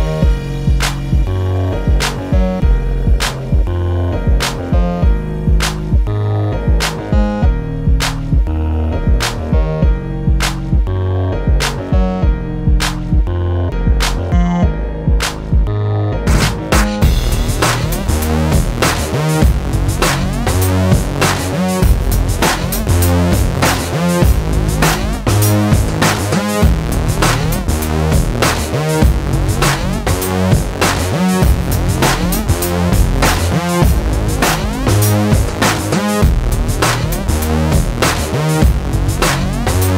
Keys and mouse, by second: 5.6 middle click, 5.7-6.7 drag, 6.9 click, 7.3 middle click, 7.5 middle click, 7.9 middle click, 8.1 click, 8.1 ctrl+b, 8.7 click, 9.1 ctrl+b, 9.8 ctrl+KP_Subtract, 9.9 alt+s, 11.0 middle click, 11.9 ctrl+s, 12.5 KP_0, 14.6 ctrl+b, 15.4 ctrl+KP_Subtract, 16.0 alt+s, 17.8 alt+s, 19.3 alt+m, 21.0 alt+m, 21.6 Tab, 22.7 Tab, 24.1 middle click, 24.7 alt+s, 25.7 click, 26.2 click, 26.8 middle click, 28.1 click, 28.4 Tab, 29.0 Tab, 29.7 click, 30.0 middle click, 30.5 a, 30.6 Tab, 31.2 middle click, 32.3 ctrl+b, 32.8 ctrl+KP_Subtract, 32.9 alt+s, 33.7 middle click, 35.2 alt+m, 37.1 middle click, 37.5 click, 37.8 alt+m, 38.7 alt+m, 39.3 click.